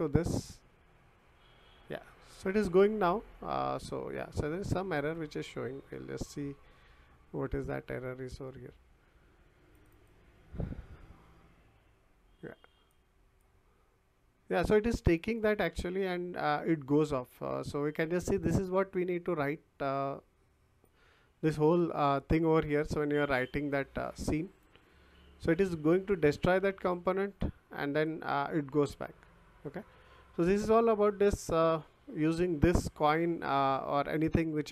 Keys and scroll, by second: 4.6 Escape.